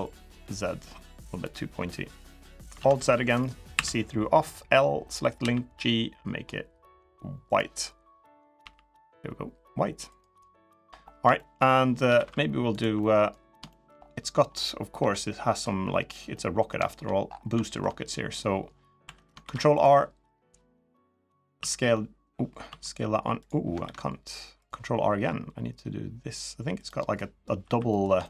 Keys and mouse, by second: 2.5 alt+z, 3.0 click, 3.5 l, 5.1 g, 8.3 g, 10.4 click, 11.1 shift+middle click, 11.9 ctrl+r, 12.7 middle click, 13.4 shift+middle click, 14.7 KP_3, 16.1 middle click, 17.4 shift+middle click, 17.8 middle click, 18.8 2, 19.2 ctrl+r, 21.3 s, 22.4 s, 23.6 ctrl+r, 26.9 middle click, 27.4 3, 27.6 middle click, 28.0 shift+middle click.